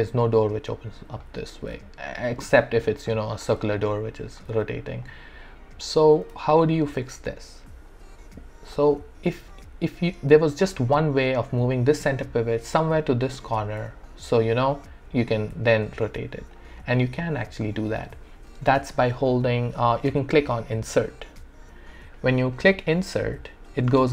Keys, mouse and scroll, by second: 1.5 ctrl+z, 3.8 alt+click, 4.5 alt+r, 5.0 click, 6.1 w, 6.5-9.3 alt+drag, 14.1-15.7 alt+drag, 15.7-24.1 alt+drag.